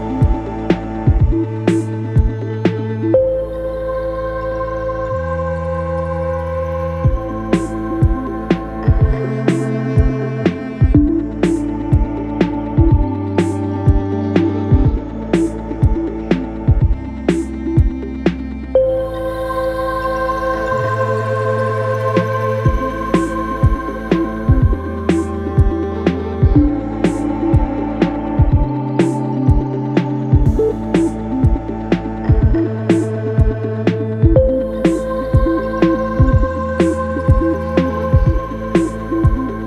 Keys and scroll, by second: 11.5 Delete, 12.4 2, 13.7 ctrl+d, 13.8 Escape, 16.4 Escape, 24.3 ], 26.3 4, 30.8 3, 32.8 4, 33.4 3, 34.9 4, 35.3 3, 36.4 ], 38.4 4.